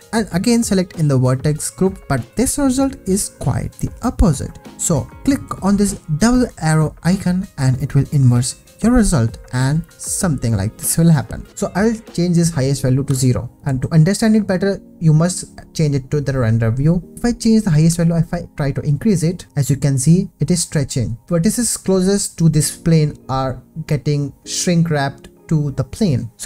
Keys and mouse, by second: 3.8 click, 11.5 ctrl+z, 12.1-13.5 drag, 13.7 ctrl+s, 17.1 Tab, 18.3-21.2 shift+drag.